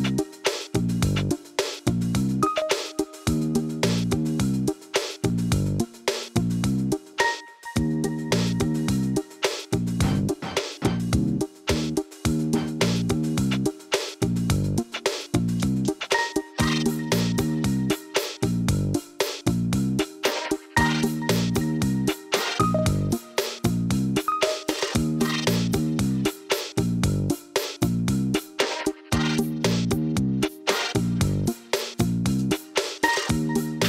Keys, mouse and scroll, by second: 2.7 click, 3.3 Tab, 3.5 click, 4.3 shift+click, 4.7 middle click, 5.7 Tab, 5.9 scroll down 2, 6.1-6.6 middle drag, 6.6 click, 6.9-8.0 middle drag, 8.0 ctrl+s, 8.4-9.1 scroll up 4, 9.1 scroll down 1, 9.2 middle click, 9.7 scroll down 1, 10.0-10.7 shift+middle drag, 10.7-12.0 scroll down 1, 12.0 ctrl+s, 16.0 click, 16.5 shift+a, 18.6-19.2 scroll up 10, 19.2-19.5 shift+middle drag, 19.6-20.0 scroll up 4, 20.0-20.6 scroll down 1, 20.6 KP_Divide, 21.1-21.4 scroll down 2, 21.4-21.8 shift+middle drag, 21.8 s, 22.7 middle click, 23.4 s, 24.4 s, 25.2-25.9 middle drag, 25.9 s, 26.6-26.9 middle drag, 26.9-27.3 scroll up 3, 27.3 Tab, 27.8 3, 27.9 click, 28.1 middle click, 28.9 shift+click, 29.1 middle click, 29.5 shift+click, 29.7 middle click, 30.5 i, 32.1-32.4 scroll up 2, 32.4 middle click, 32.9 e, 33.2 alt+s.